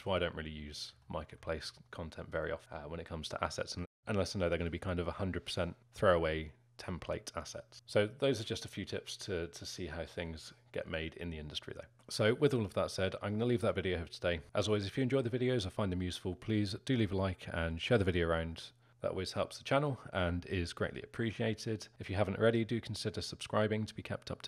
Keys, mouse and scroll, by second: 2.5-3.6 scroll up 1, 3.6-4.0 scroll up 1, 4.0-21.3 alt+middle drag.